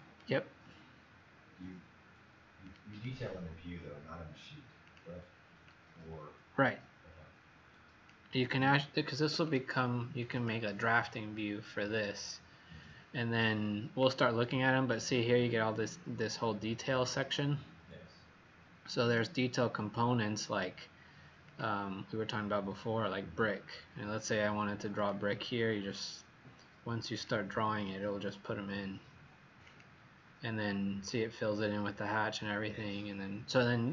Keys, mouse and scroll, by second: 2.8 click, 4.9 click, 10.3 click, 19.0 click, 31.0-31.4 scroll up 8.